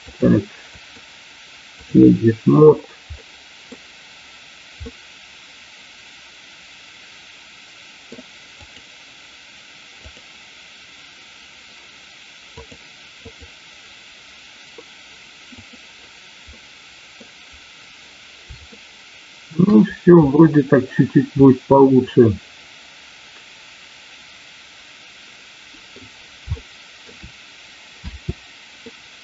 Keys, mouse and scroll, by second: 0.9-2.0 drag, 0.9 a, 3.2 middle click, 4.9-8.1 middle drag, 8.5 click, 10.1 click, 12.6 click, 15.5 click, 16.5 middle click, 18.7 shift+middle click, 21.3-26.0 middle drag, 26.6 shift+middle click, 28.0 space, 28.8-29.2 middle drag.